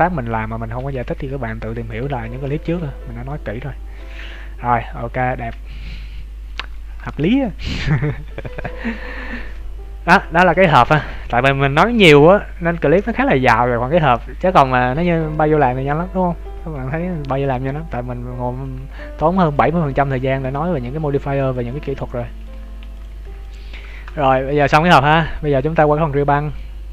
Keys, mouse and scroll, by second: 0.2 alt+right click, 0.8 g, 2.3 ctrl+s, 2.6 Tab, 2.9-3.4 scroll down 2, 3.2 middle click, 5.3 scroll up 2, 5.6 middle click, 7.1 ctrl+s, 7.4-7.9 scroll down 3, 7.9 KP_1, 8.4 KP_3, 16.8 scroll up 3, 17.3 scroll up 4, 18.1-19.3 scroll down 2, 19.3 shift+middle click, 19.9 middle click, 21.1 scroll down 2, 21.4 shift+middle click, 21.7 middle click, 22.8 ctrl+s, 23.4 click, 23.8 shift+middle click.